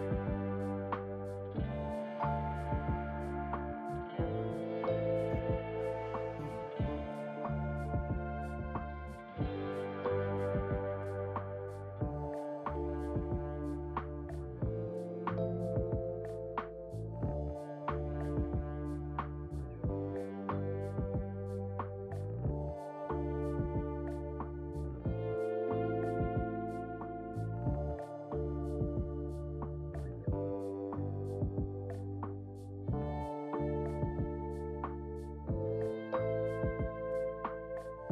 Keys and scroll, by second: 4.1 f, 5.3 Down, 5.8 Return, 36.0 `.